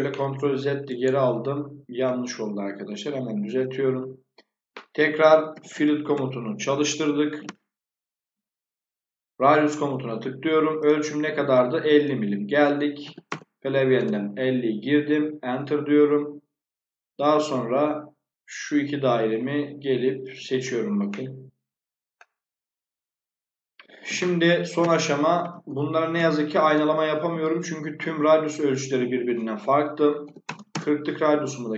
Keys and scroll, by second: 4.7-6.2 typing, 6.8 Return, 12.7-13.7 typing, 13.9 Return, 24.2-26.1 typing, 26.6 Return, 29.9-30.8 typing.